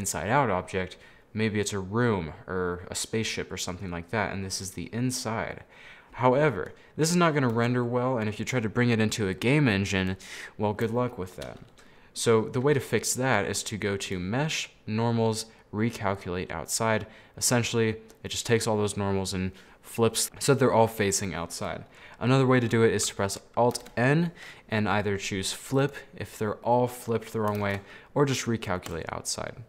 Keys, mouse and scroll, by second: 4.3-6.3 middle drag, 6.3-6.7 scroll down 4, 6.7 middle click, 7.6 a, 7.9-10.3 middle drag, 10.3 scroll down 1, 10.5-14.1 middle drag, 14.1-17.1 drag, 20.3-23.8 middle drag, 23.9 alt+n, 26.8 middle click, 27.7 alt+n.